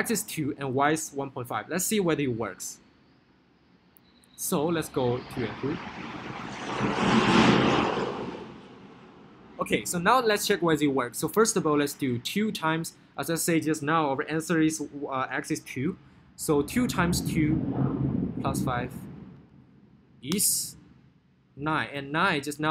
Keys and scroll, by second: 11.6 2, 17.2 2, 19.6 5, 20.6 Return.